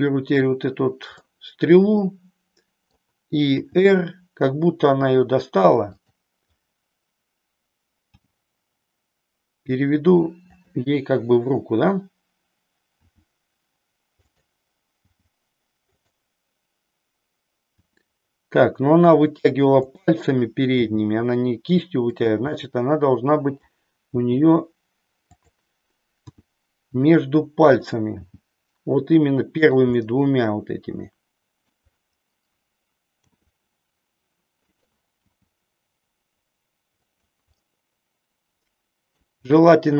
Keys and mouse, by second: 1.1-2.9 middle drag, 3.5 r, 6.1 click, 8.2 g, 12.9 r, 15.1 g, 17.7 r, 20.7 g, 22.6-23.7 middle drag, 24.1 g, 25.3 click, 26.3 r, 27.7 click, 28.3 g, 29.7 click, 30.1-31.7 middle drag, 33.2 r, 34.8 click, 35.2 g, 37.1 click, 37.6-39.3 middle drag.